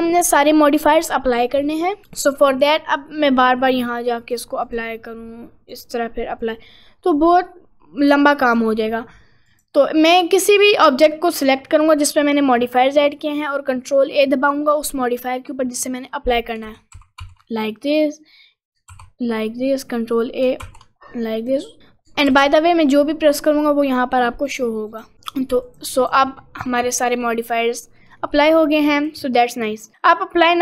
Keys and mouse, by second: 1.7 click, 4.3 click, 5.9-7.4 drag, 8.2 click, 9.5 click, 16.7 ctrl+a, 17.0 ctrl+a, 17.3 ctrl+a, 19.0 ctrl+a, 19.8 click, 20.6 ctrl+a, 22.4 ctrl+a, 24.5 click, 24.9 click, 26.0 click, 26.4 middle click, 27.0 middle click, 27.6 middle click, 28.0 middle click, 28.4 middle click, 29.3 middle click, 29.8 middle click.